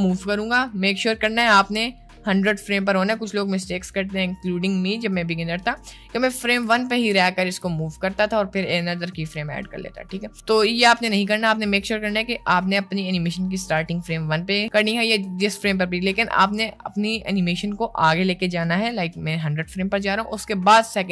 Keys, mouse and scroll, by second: 1.3-4.5 drag, 6.6 g, 7.4 g, 16.4-18.6 drag.